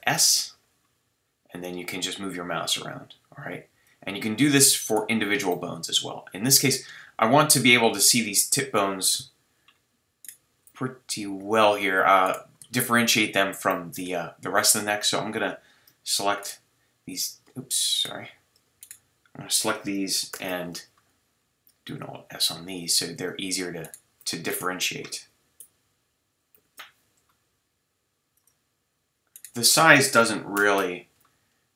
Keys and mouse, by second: 3.9 click, 4.9-9.2 middle drag, 5.5 click, 5.5 right click, 9.2 KP_3, 10.2-12.4 right drag, 10.6 g, 12.4 click, 20.3 ctrl+alt+s, 26.5 ctrl+alt+s, 28.4 click, 30.6 ctrl+alt+s.